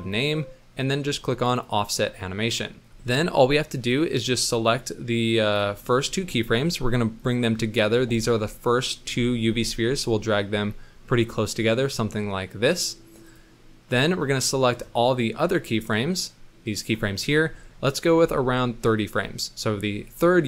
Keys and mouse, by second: 1.5 click, 4.4-5.6 drag, 6.4 middle click, 7.2-7.5 drag, 9.5 g, 15.2 middle click, 15.7-17.0 drag, 18.2 g.